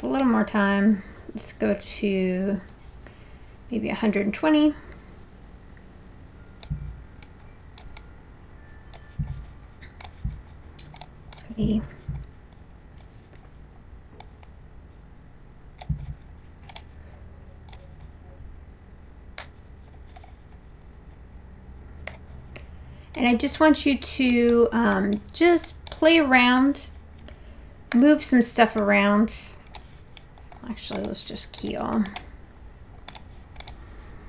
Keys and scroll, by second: 19.4 w, 22.1 e, 27.9 w.